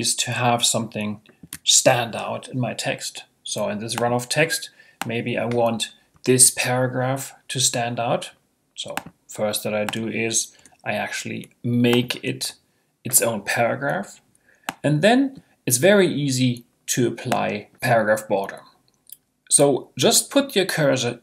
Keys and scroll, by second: 10.6 Return, 12.4 Return.